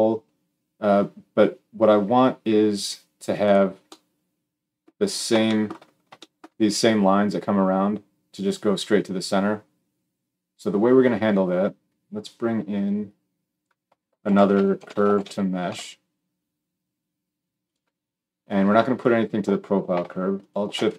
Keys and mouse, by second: 12.7-17.7 drag, 17.7-20.3 middle drag, 20.3 alt+shift+click, 20.4-20.9 alt+shift+middle drag.